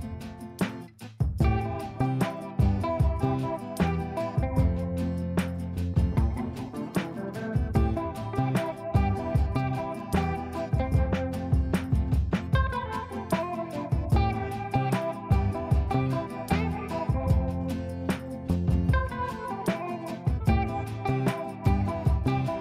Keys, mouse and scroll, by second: 1.7-5.5 drag, 5.5 click, 6.6 F3, 6.9 F2, 7.5-13.0 drag, 13.0 space, 13.9 click, 14.7 right click, 17.2 click, 18.3 click, 19.2 space, 20.7 click, 21.1 right click, 21.8 click, 22.4 ctrl+a.